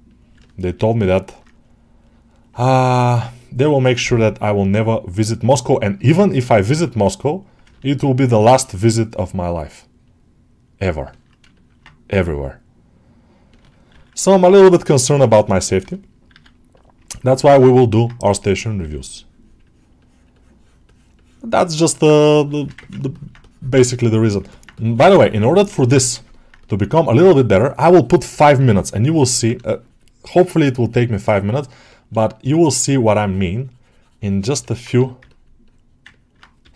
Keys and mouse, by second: 0.3 middle click, 1.0 middle click, 1.4-2.4 drag, 2.5 middle click, 2.9 middle click, 4.1-7.5 drag, 7.6 ctrl+middle click, 9.9 click, 11.0 ctrl+alt+middle click, 11.4 alt+shift+middle click, 14.1 ctrl+alt+middle click, 14.5 shift+click, 17.2 ctrl+alt+middle click, 17.6 alt+middle click, 18.8-19.9 drag, 20.2 click, 20.7 click, 21.0 click, 22.0 shift+click, 22.7 ctrl+alt+middle click, 23.0 alt+middle click, 23.3 click, 24.4 middle click, 25.6 click, 25.9 ctrl+middle click, 26.2-28.0 alt+middle drag, 28.3 middle click, 29.2 middle click, 29.5 shift+click, 30.3 click, 31.1 alt+middle click, 31.5 middle click, 31.8 middle click, 32.2 middle click, 33.1 click, 34.5 alt+middle click, 35.1 alt+middle click, 36.0 ctrl+alt+middle click.